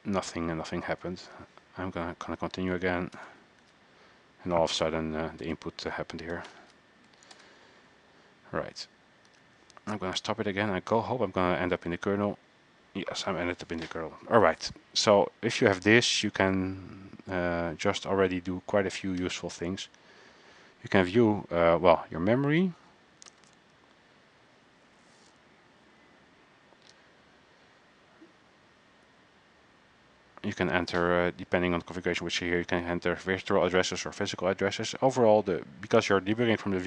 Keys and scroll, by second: 0.0-0.2 typing, 1.4 alt+Tab, 3.9 alt+Tab, 5.6 Return, 6.2-7.8 typing, 9.5 alt+Tab, 9.5 typing.